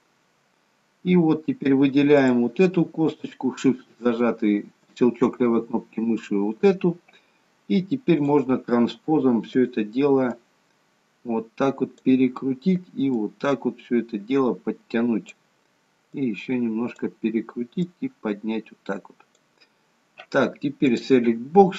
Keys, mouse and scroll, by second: 2.2 click, 4.1 shift+click, 8.2 click, 9.4 click, 10.3 click, 13.1 click, 16.2 click, 17.9 click, 20.9 click.